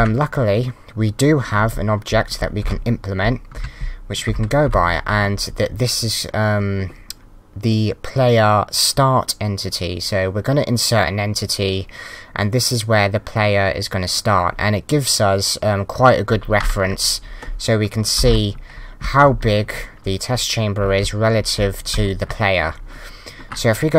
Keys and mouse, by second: 1.4-3.2 typing, 4.3 Left, 4.5 w, 4.6 Down, 18.1 Left, 18.2 Up, 18.8 a, 19.0 s, 19.3 Up, 19.8 a, 20.8 d, 21.4 Down, 21.9 d.